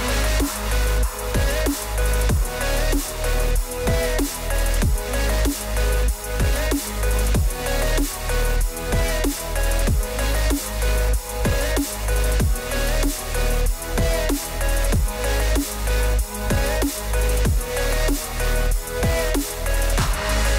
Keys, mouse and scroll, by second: 0.1 click, 0.4 click, 0.8 click, 0.9 scroll, 1.7 click, 1.9-2.6 scroll, 3.9 click, 4.5 click, 4.6 click, 5.2 click, 5.6 click, 6.2 click, 6.9 scroll, 7.4 click, 7.9 click, 10.0 click, 10.7 click, 12.0 click, 13.5 middle click, 15.0 shift+click, 18.2 click.